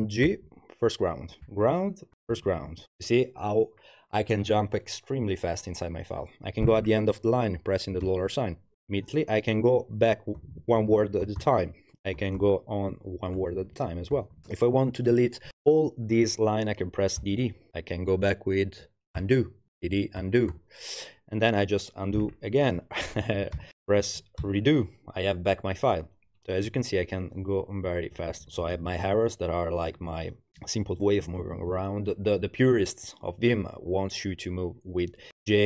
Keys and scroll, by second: 0.3 shift+g, 1.4-2.8 typing, 8.0 shift+4, 10.4-14.4 typing, 17.2 typing, 19.2-21.0 typing, 23.6 alt+r, 24.4 ctrl+r, 27.9 Down, 28.1 Down, 28.3 Down, 28.4 Left, 28.6 Left, 28.8 Left, 29.9 Down, 30.1 Down, 30.8 Down, 31.2 Right, 31.4 Right, 31.5 Right, 35.3-35.6 typing.